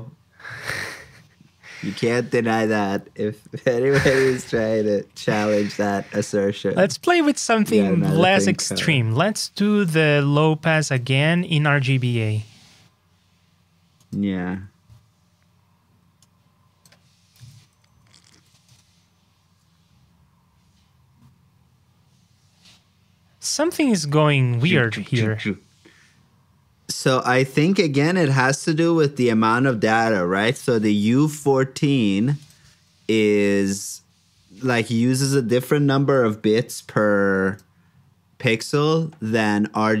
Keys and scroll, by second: 6.0 alt+shift+Down, 11.2 super+c, 14.4 super+v, 17.3 super+c, 17.6 super+j, 36.0 super+j.